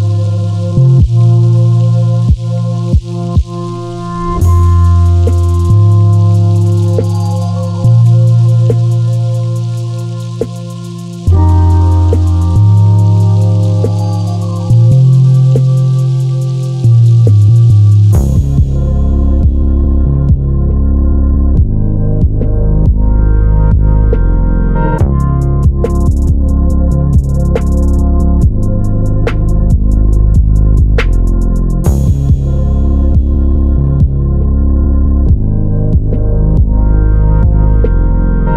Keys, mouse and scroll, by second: 0.7 shift+click, 1.3 ctrl+b, 4.1 click, 4.9 2, 5.0 3, 5.1 click, 5.6 g, 7.0 click, 7.6 click, 8.1 ctrl+r, 11.0 click, 11.3 ctrl+r, 14.1 Escape, 14.4 click, 14.8 scroll up 1, 15.2-16.6 middle drag, 15.5 scroll up 1, 16.5 3, 16.6 click, 17.1 s, 17.6 Escape, 18.2 s, 20.7 click, 21.3 s, 23.9 click, 25.3 i, 25.9 click, 26.6 i, 27.4 click, 27.8 e, 30.7 Escape, 31.0 Delete, 32.1 click, 32.2 scroll down 1, 32.5-36.8 middle drag, 33.5 scroll down 1, 36.8 ctrl+r.